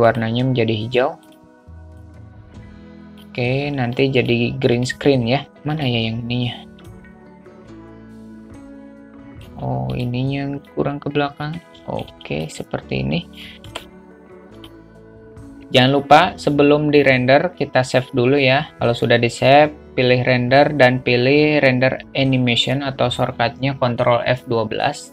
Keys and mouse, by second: 0.4-0.7 drag, 1.5 click, 5.0-5.4 drag, 6.0 click, 7.2-9.7 alt+middle drag, 11.0-12.3 drag, 14.9 click, 18.8-25.1 drag.